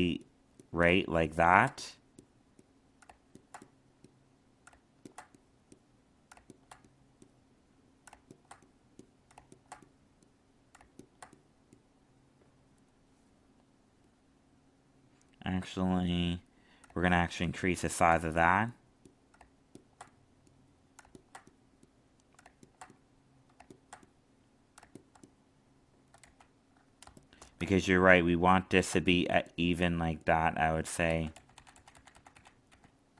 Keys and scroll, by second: 26.2 ctrl+z, 31.0 ctrl+z.